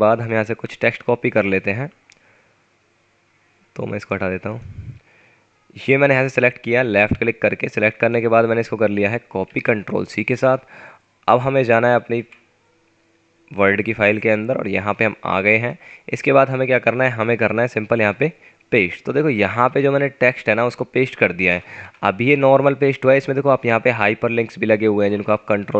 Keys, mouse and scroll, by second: 2.5 scroll down 1, 4.9 scroll up 1, 9.5 ctrl+c, 21.5 Return, 21.8 Return.